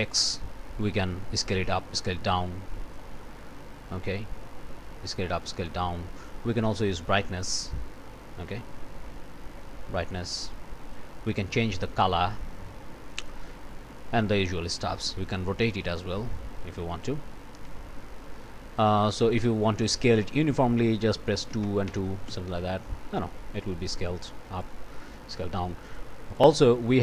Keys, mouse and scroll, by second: 0.1-3.1 drag, 3.9-6.5 drag, 7.4-11.1 drag, 11.5 click, 12.3-13.5 drag, 13.9 click, 15.2-17.3 drag, 19.1 click, 21.5 2, 21.7 Tab, 21.9 2, 22.3 Return, 24.6-26.2 drag, 26.3 click.